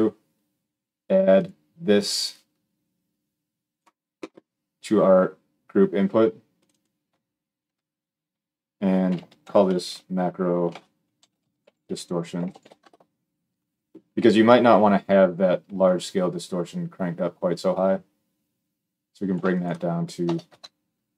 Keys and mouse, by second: 1.3 middle click, 2.1-6.4 drag, 6.4 middle click, 6.6-21.1 drag.